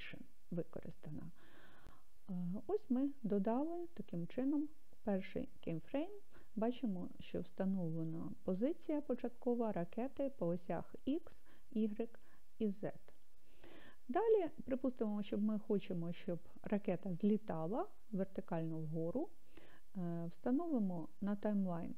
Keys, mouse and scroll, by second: 5.9 click, 20.6-21.9 drag.